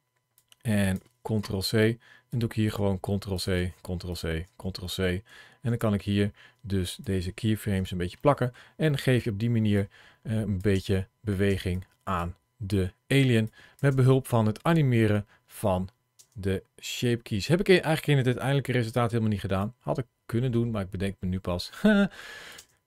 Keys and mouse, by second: 0.3 click, 1.2 ctrl+c, 2.1 click, 2.6 ctrl+v, 3.2 click, 3.4 ctrl+v, 3.9 click, 4.4 ctrl+v, 6.8 click, 7.4 ctrl+v, 8.1 middle click, 8.8 middle click, 9.6 click, 10.6 space, 11.3 space, 11.5 click, 13.3 click, 13.7 space, 16.0 space, 19.4-22.4 drag, 22.4 space.